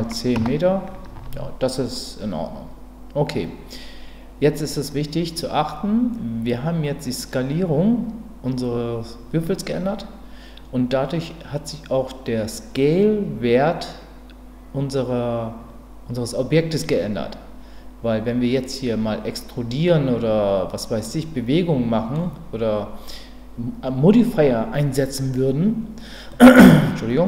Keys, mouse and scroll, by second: 6.7 click, 21.0-22.1 middle drag, 26.3-27.2 middle drag.